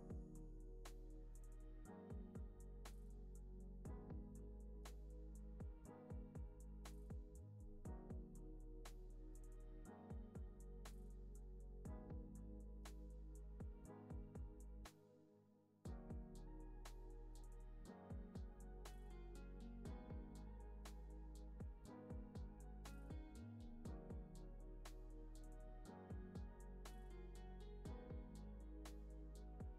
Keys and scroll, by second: 7.9 super+-, 8.6 space, 12.0 z, 12.6 x, 18.5 z, 19.0 x, 19.7 space, 21.0 super+-, 22.9 space, 29.5 space.